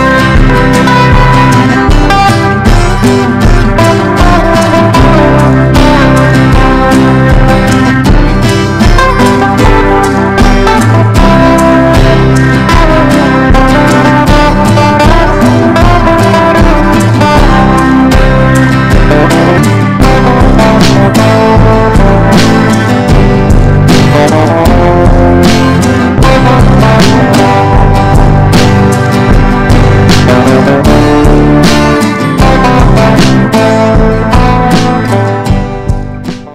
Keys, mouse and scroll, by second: 1.5 right click, 1.9 click, 3.9 click, 4.9 ctrl+g, 6.7 click, 9.5 Down, 10.0 Down, 14.4 click.